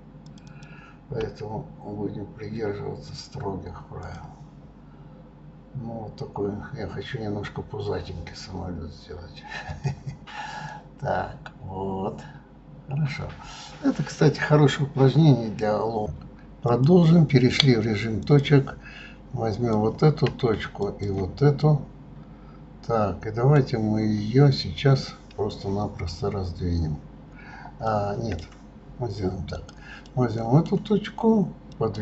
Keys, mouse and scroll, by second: 0.4 click, 0.7 click, 1.4 s, 9.9 click, 10.9-13.9 middle drag, 16.7 click, 18.2 click, 19.5 click, 20.8 shift+click, 21.6-24.6 middle drag, 27.9-29.5 middle drag, 29.5 click, 30.0-32.0 middle drag.